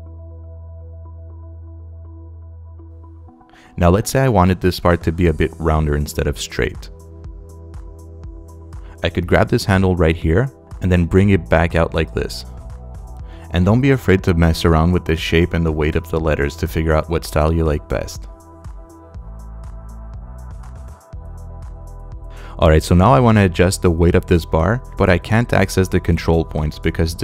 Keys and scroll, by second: 22.2 space.